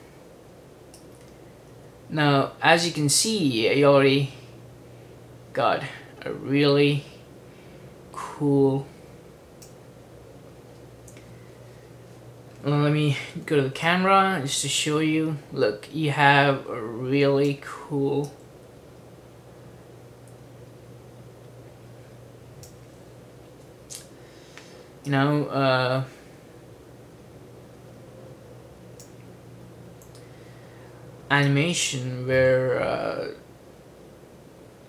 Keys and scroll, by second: 13.4 c.